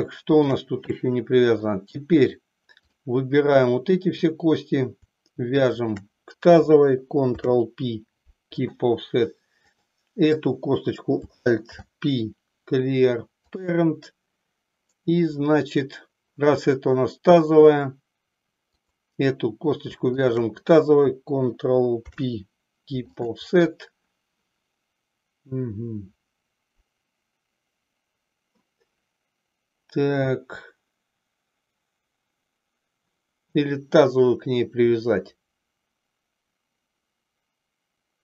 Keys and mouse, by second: 1.2 middle click, 2.8 click, 3.7 click, 5.9 shift+click, 7.3 ctrl+p, 9.6 click, 11.6 alt+p, 18.6 click, 20.3 shift+click, 21.9 ctrl+p.